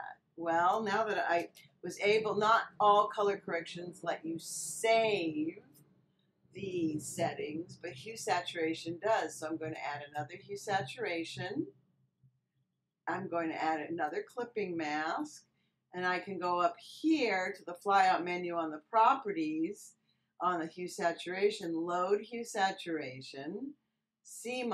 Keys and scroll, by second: 1.3 Return.